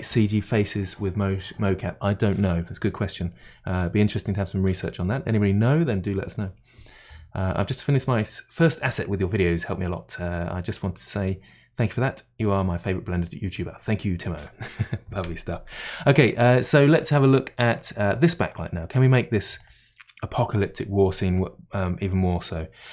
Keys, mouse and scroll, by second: 17.1-18.5 middle drag, 18.5-19.3 drag, 19.6 click, 22.8-22.9 middle drag.